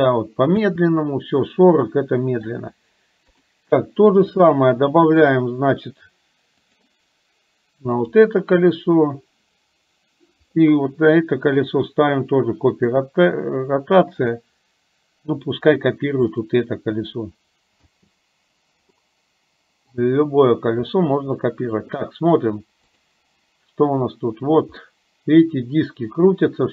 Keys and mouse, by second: 0.7 space, 1.0-2.5 middle drag, 4.4-5.5 drag, 10.5 click, 11.7-13.0 drag, 14.2 click, 18.0 space, 19.0 middle click, 20.9 middle click, 23.6 click, 24.9-26.7 middle drag.